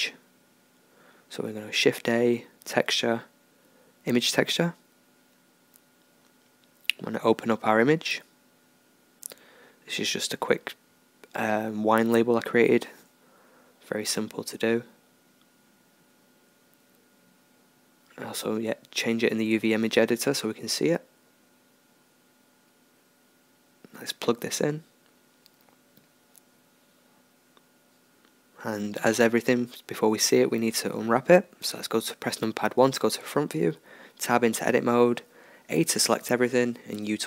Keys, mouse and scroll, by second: 6.6 click, 9.4-10.5 drag, 12.2-14.2 drag, 17.0-21.3 middle drag, 21.3-23.2 drag, 24.7-27.9 drag, 30.6 Tab, 32.8 KP_1, 33.5 a, 34.9 u.